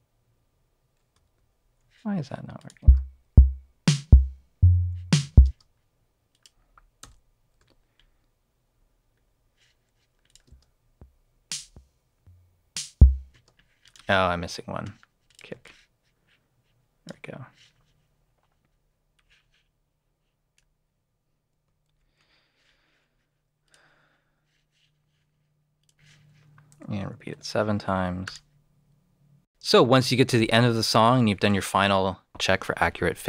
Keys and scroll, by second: 1.3 super+z, 5.4 alt+space, 7.0 v, 7.5 alt+v, 10.4 alt+space, 13.3 space, 21.8 super+c, 27.3 7.